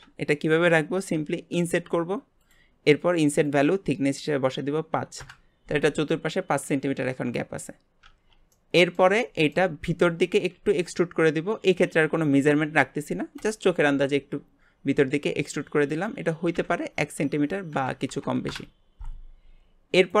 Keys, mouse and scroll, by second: 3.4-6.4 drag, 8.5-10.0 middle drag, 10.0-10.5 scroll up 1, 10.5 e, 15.9-19.0 drag, 20.0 click.